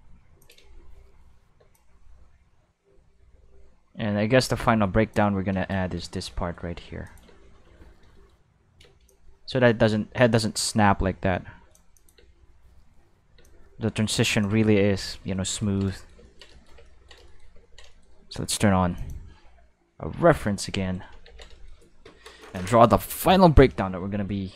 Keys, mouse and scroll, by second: 0.3 space, 0.4 click, 0.6 space, 1.6 space, 1.7-5.9 drag, 6.0 middle click, 6.6-7.1 middle drag, 7.1 click, 7.3 space, 7.7 q, 8.8 space, 9.1-11.7 drag, 12.0 click, 12.2 space, 13.4 space, 13.4-14.4 drag, 15.6 ctrl+middle click, 15.9 shift+middle click, 16.5 shift+middle click, 16.7 ctrl+middle click, 17.3 ctrl+shift+middle click, 19.0 click, 19.9 q, 20.7 shift+middle click, 21.3 ctrl+s.